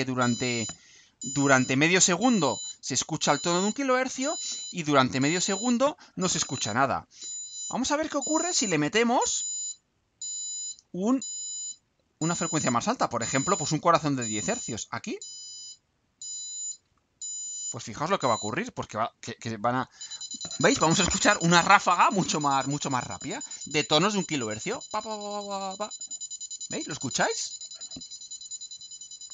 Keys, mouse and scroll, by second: 13.7 click, 15.8 click, 16.9 ctrl+u.